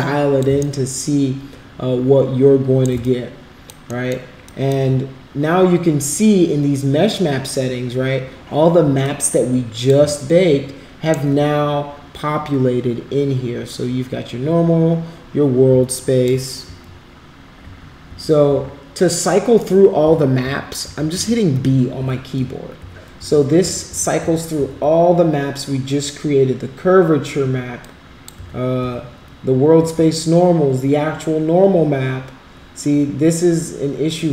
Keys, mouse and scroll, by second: 0.6-2.8 shift+right drag, 3.0 alt+click, 3.9 alt+middle click, 4.4 alt+click, 9.0 alt+click, 10.2-11.2 shift+right drag, 15.8 alt+click, 16.7 b, 18.0 b, 18.5 b, 20.0-24.5 typing, 27.8 click.